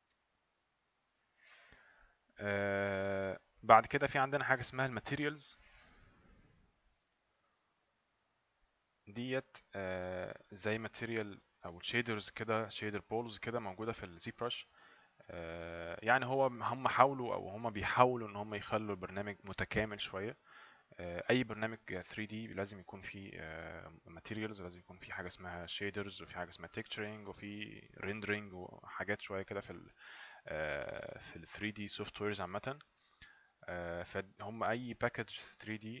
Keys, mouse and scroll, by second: 6.0 click.